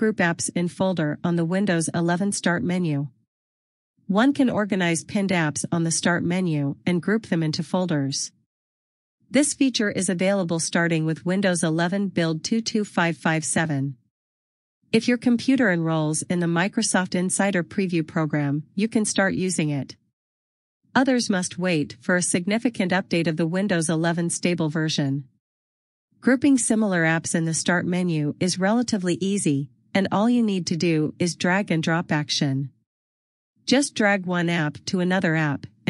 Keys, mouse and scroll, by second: 6.2-6.7 scroll down 1, 35.4 click.